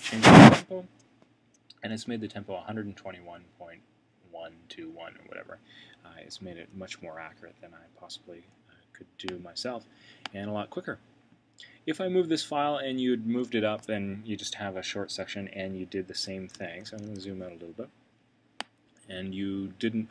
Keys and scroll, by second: 16.6 super+[.